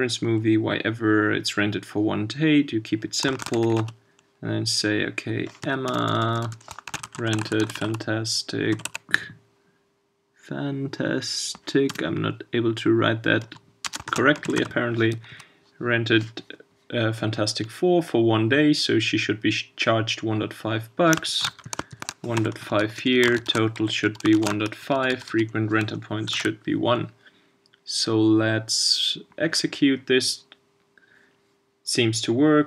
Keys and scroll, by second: 0.4 ctrl+space, 26.3 super+s.